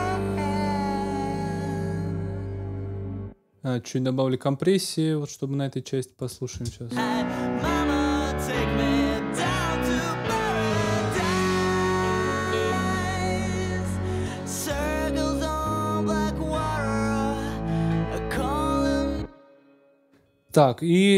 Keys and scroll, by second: 3.0 space, 6.5 space, 18.1 super+s, 18.9 super+space.